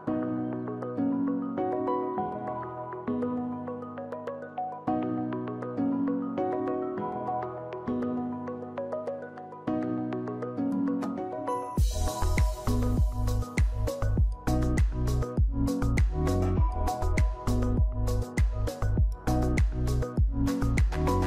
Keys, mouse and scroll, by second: 21.1 ctrl+d.